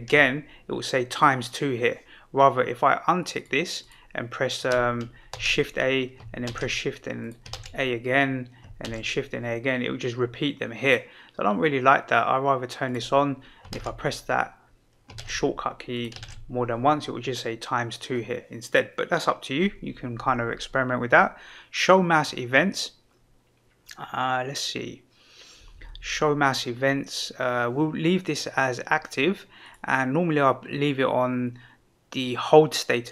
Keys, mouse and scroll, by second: 3.3 click, 3.8 click, 5.3 shift+a, 7.2 click, 7.5 shift+a, 8.8 shift+a, 12.8 click, 13.7 shift+a, 16.2 shift+a, 29.6-33.1 drag.